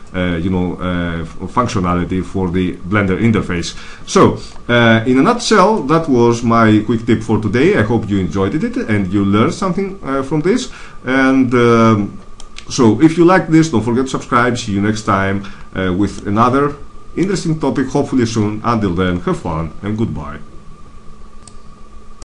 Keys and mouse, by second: 5.7-7.3 middle drag, 7.7 middle click, 16.1-19.7 middle drag.